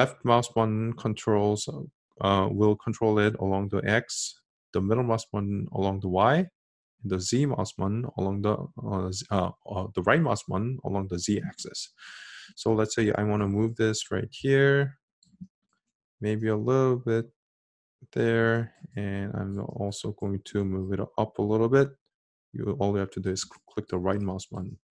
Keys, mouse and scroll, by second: 0.0-3.8 drag, 4.6-6.7 middle drag, 7.8-12.0 right drag, 13.3-16.0 drag, 16.0-18.2 middle drag, 20.7-24.9 right drag.